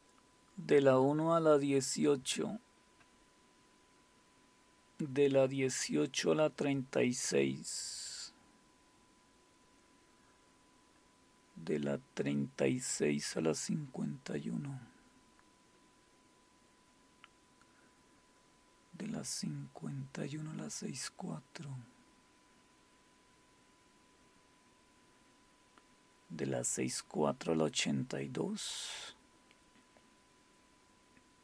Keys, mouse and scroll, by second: 1.6-4.1 scroll down 4, 4.1-6.3 scroll down 1, 8.0-10.1 scroll down 4, 10.1-12.3 scroll down 1, 14.0-17.4 scroll down 5, 17.4-18.3 scroll down 1, 20.2-21.3 scroll down 2, 21.7 scroll down 2, 22.3-23.1 scroll down 3, 23.6 scroll up 2, 24.2 scroll up 2, 24.8-25.6 scroll down 2, 29.1-31.4 scroll down 5.